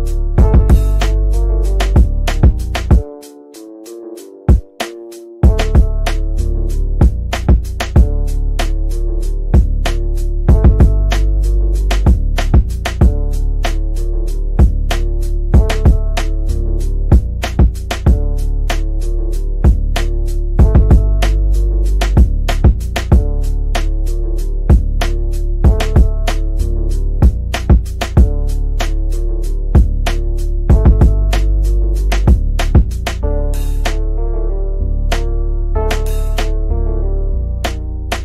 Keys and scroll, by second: 4.9 Delete, 18.9-20.8 typing, 28.0 F9.